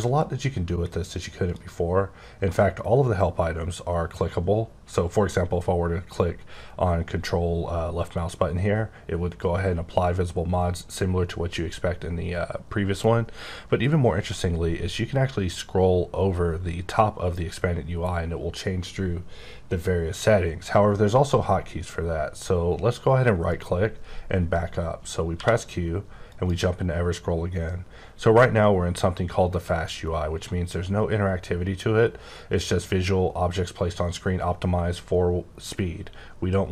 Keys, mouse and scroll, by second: 0.1 click, 14.9-16.3 scroll up 10, 17.0-18.5 scroll up 7, 19.1-19.8 scroll up 4, 19.8 scroll down 1, 20.1-22.0 scroll up 2, 23.5 right click, 25.3 q, 26.2 click, 28.5-30.2 scroll up 8, 30.2 scroll up 2, 31.1-33.2 scroll up 5, 34.0-35.5 scroll up 16, 35.5-36.2 scroll up 3, 36.2-36.7 scroll up 8.